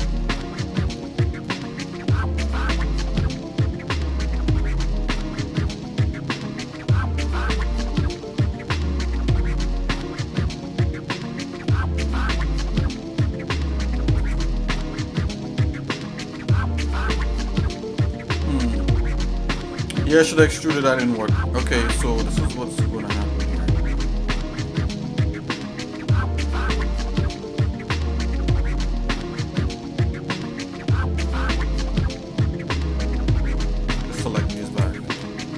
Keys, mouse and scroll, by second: 0.0 shift+middle click, 1.0 shift+middle click, 1.9 shift+middle click, 4.5 Tab, 5.7-7.2 shift+middle drag, 7.6 shift+middle click, 9.0 scroll down 1, 9.4 middle click, 10.0-11.2 shift+middle drag, 11.7 middle click, 12.2 shift+middle click, 13.3-13.7 scroll up 2, 14.2 click, 14.9 Tab, 20.3 shift+middle click, 21.5-23.4 shift+middle drag, 24.7 shift+middle click, 31.6-32.6 shift+middle drag, 34.3 Tab, 34.7 shift+click, 35.2 scroll down 2.